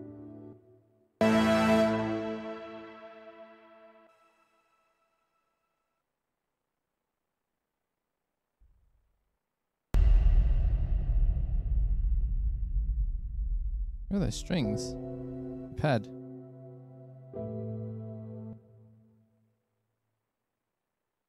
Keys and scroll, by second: 0.7 s, 1.1 space, 1.3 space, 4.3 s, 6.2 s, 7.0 s, 8.8 s, 9.6 space, 9.8 space, 14.4 s, 16.3 s, 18.8 s.